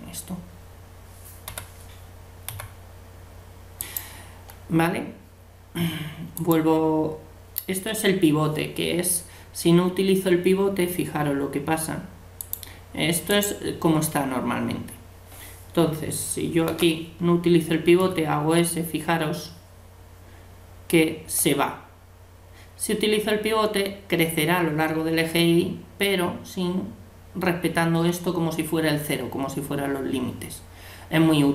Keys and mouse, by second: 1.5 l, 2.5 g, 6.4-8.2 drag, 12.4-14.3 drag, 16.7 l, 18.0 s.